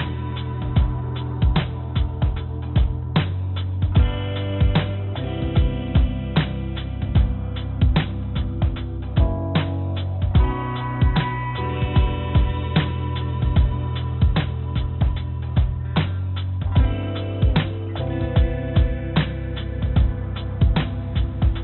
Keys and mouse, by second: 0.2 s, 4.6 s, 9.8 click, 11.4 Tab, 12.4 click, 13.4 Tab, 14.3 Tab, 15.8 ctrl+r, 17.2 Tab, 18.8 ctrl+r.